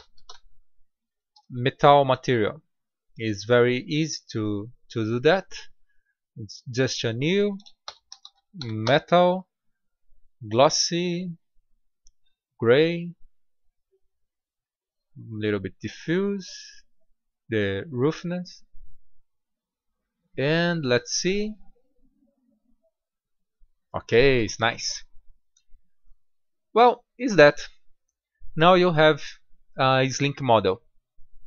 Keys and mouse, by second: 2.5-9.1 drag, 9.5-18.8 drag, 19.5-21.4 drag.